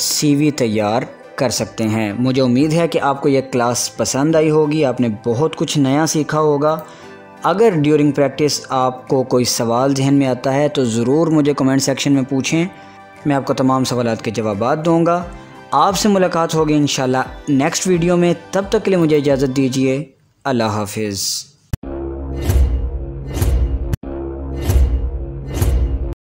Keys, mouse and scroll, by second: 1.5 click, 5.1 scroll down 1, 6.5 scroll up 1, 6.5 scroll down 1, 8.4 click, 19.7-20.7 scroll down 1, 20.7 click.